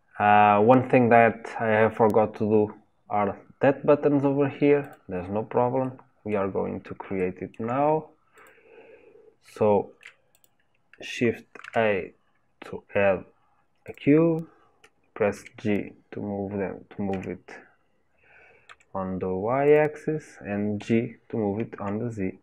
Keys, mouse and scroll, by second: 4.9 click, 5.8 middle click, 6.7-7.2 scroll up 1, 7.2-8.4 shift+middle drag, 8.4 click, 8.9-9.6 scroll down 1, 9.6 shift+middle click, 10.4 click, 14.0 shift+a, 15.4 g, 20.8 g.